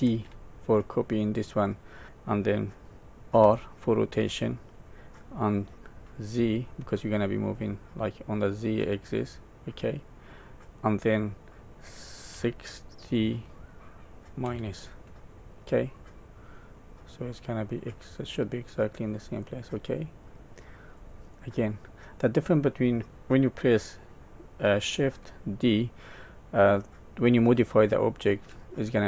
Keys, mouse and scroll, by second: 0.0 alt+d, 15.9 middle click, 17.7 middle click, 18.9-19.5 scroll up 2, 19.5 middle click, 21.1-21.7 scroll down 3, 21.7 middle click, 26.3 middle click, 28.0 middle click.